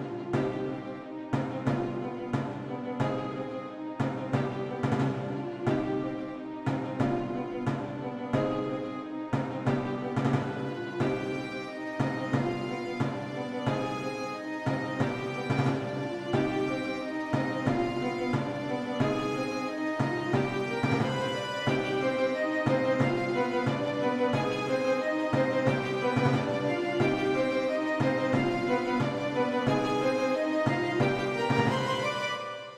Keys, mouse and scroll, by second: 3.0-3.7 typing, 4.8-6.4 typing, 9.4 click, 13.4 click, 15.7-16.1 typing, 17.2 BackSpace, 20.0 click, 25.1-30.7 typing.